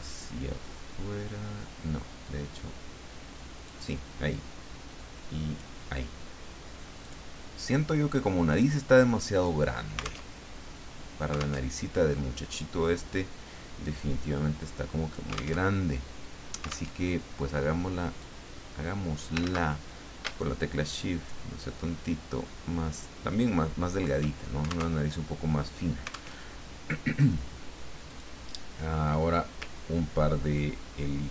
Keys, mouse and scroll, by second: 4.3-5.9 drag, 7.0 click, 8.5 click, 9.3 click, 10.3 alt+Tab, 11.6 alt+Tab, 12.5 click, 13.8-15.3 drag, 15.6 alt+Tab, 16.9 alt+Tab, 18.2-19.4 drag, 19.4 ctrl+z, 20.9-24.3 shift+drag, 25.0 alt+Tab, 26.4 alt+Tab, 28.1 click, 30.5-31.3 ctrl+drag.